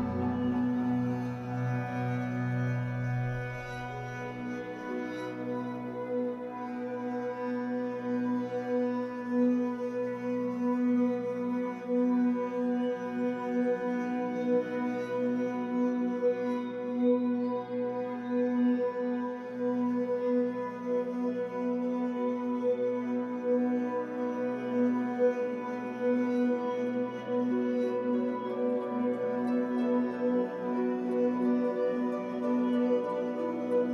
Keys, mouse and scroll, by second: 0.5 click, 3.0 click, 3.8 scroll down 2, 4.0-10.3 shift+middle drag, 4.6-5.0 scroll up 2, 5.6 Tab, 5.8-6.2 scroll down 2, 6.5 scroll down 2, 7.6 ctrl+s, 8.3-8.6 scroll up 2, 9.3-9.7 scroll up 2, 9.7 Tab, 10.3 click, 10.6-11.9 middle drag, 11.9 click, 12.8 middle click, 13.5 click, 14.4 click, 15.6-16.7 drag, 16.7 scroll down 2, 16.9-27.5 middle drag, 17.3 Tab, 17.5-17.8 scroll down 2, 18.1 scroll down 2, 19.2-19.7 scroll up 2, 20.0 scroll down 1, 20.7 ctrl+s, 21.0 scroll down 1, 21.6 scroll down 1, 22.0-22.4 scroll up 1, 24.3 scroll up 1, 25.8 Tab, 26.7 scroll up 2, 27.5 click, 28.0 KP_1, 28.6 z, 29.3-29.6 scroll up 1, 29.6-33.1 shift+middle drag, 30.1-30.9 scroll up 2, 30.9-31.8 scroll up 1, 33.1-33.9 drag.